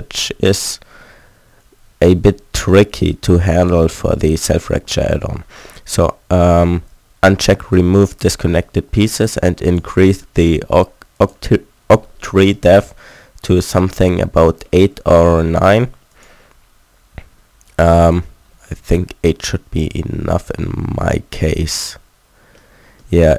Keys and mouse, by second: 0.3 a, 2.1 Tab, 12.5-18.1 middle drag, 19.1-20.1 middle drag, 22.9-23.3 middle drag.